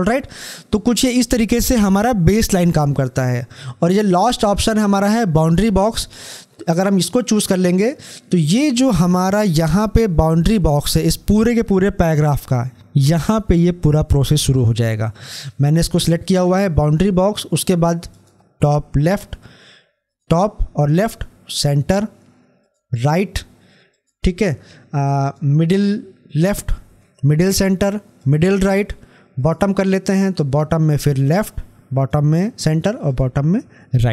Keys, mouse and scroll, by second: 5.8 click, 16.3 click.